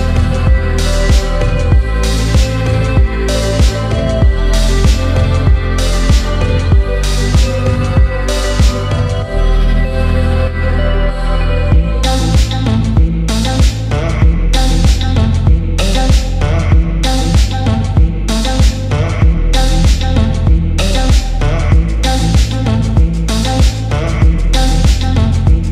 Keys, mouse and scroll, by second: 0.5 click, 1.6-4.1 drag, 7.9 3, 8.8 click, 9.2 alt+click, 10.4 alt+shift+click, 11.7 alt+shift+click, 12.8 alt+shift+click, 13.9 alt+shift+click, 15.1 alt+shift+click, 16.3 alt+shift+click, 18.0 alt+shift+click, 19.5 alt+shift+click, 21.0 alt+shift+click, 22.3 alt+shift+click, 23.5 alt+shift+click, 24.7 alt+shift+click.